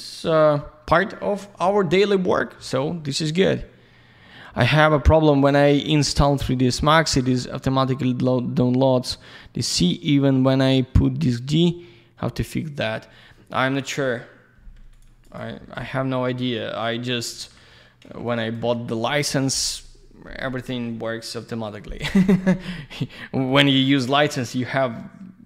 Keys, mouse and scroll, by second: 14.9 ctrl+shift+click, 15.3 ctrl+shift+click, 15.5 ctrl+shift+z, 16.4 ctrl+alt+shift+middle click, 17.4 ctrl+alt+shift+w, 17.7 ctrl+alt+shift+middle click, 18.3 ctrl+shift+click, 18.6 ctrl+shift+F4, 23.1 ctrl+alt+shift+middle click, 23.6 ctrl+alt+shift+z, 23.9 ctrl+shift+click, 24.6 ctrl+alt+shift+middle click.